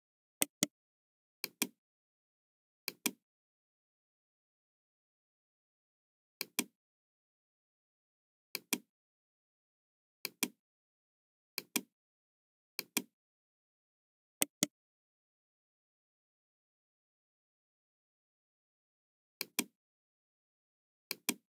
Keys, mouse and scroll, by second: 0.3 right click, 1.4 click, 2.8 click, 3.9 middle click, 6.4 click, 8.5 click, 10.2 click, 11.5 click, 12.7 click, 14.4 right click, 15.7-16.0 scroll up 1, 16.1 scroll down 1, 16.6-17.0 scroll down 2, 19.4 click, 21.0 click.